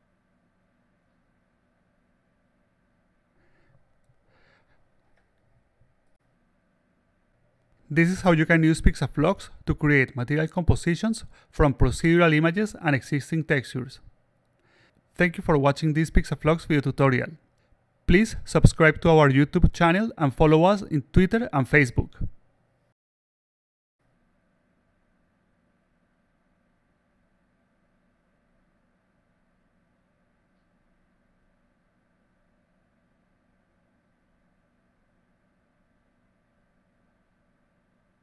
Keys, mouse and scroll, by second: 0.8-1.9 alt+drag, 2.2-4.3 alt+drag, 4.6-5.3 alt+drag, 5.7-7.5 alt+drag, 12.0 click.